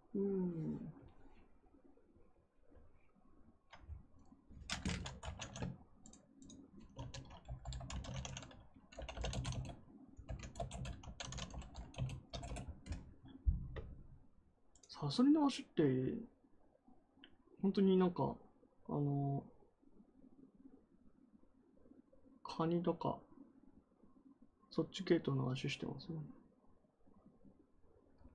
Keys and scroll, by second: 6.6-9.6 typing, 10.5 Return, 10.7-11.9 typing, 12.2 Return.